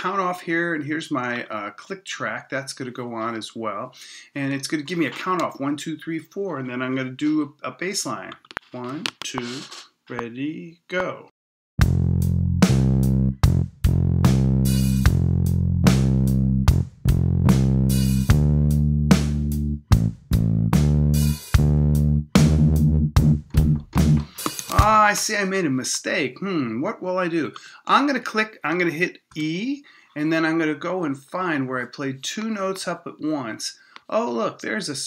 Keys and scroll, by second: 29.3 e.